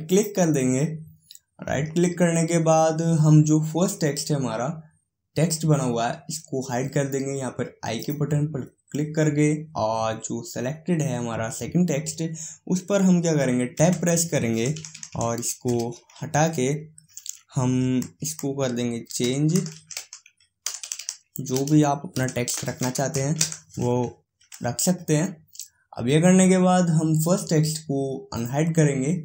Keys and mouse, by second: 8.2-10.1 drag, 14.0 Tab, 14.7-15.7 BackSpace, 19.3-20.9 typing, 22.4 n, 22.6 i, 24.7 Tab, 28.6-29.2 drag.